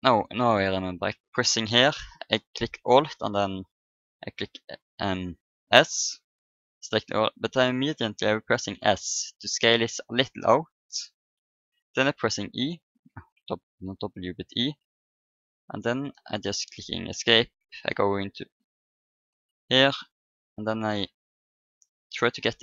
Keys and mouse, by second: 4.3 e, 11.3 middle click, 12.2 w, 13.7 e, 15.2-17.0 drag, 17.3 KP_1, 18.8 KP_5, 21.0 s, 22.5-22.6 drag.